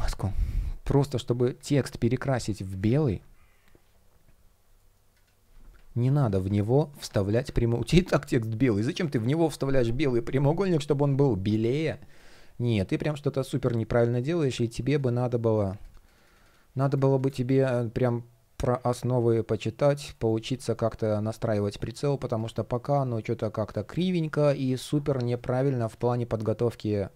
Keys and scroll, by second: 1.7 super+\, 2.7 super+\, 4.4 shift+o, 19.7 shift+o, 21.4 shift+p, 25.0 super+z.